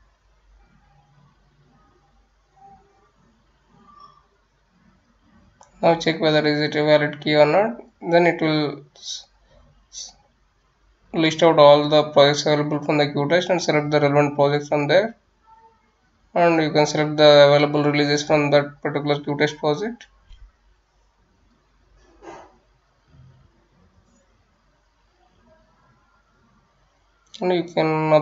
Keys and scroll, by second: 1.5 ctrl+v.